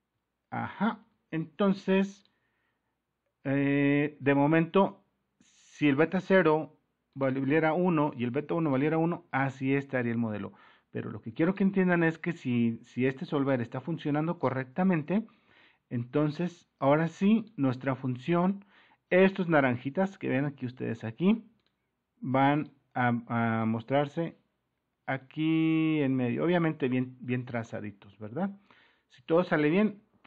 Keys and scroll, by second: 1.0 alt+Tab.